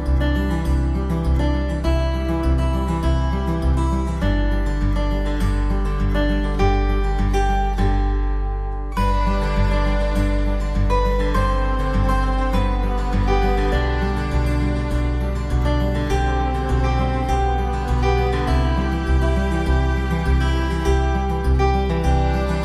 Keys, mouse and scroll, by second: 4.6 alt+middle click, 10.5-11.6 typing, 20.4 KP_5, 20.6 Return, 21.9 alt+middle click.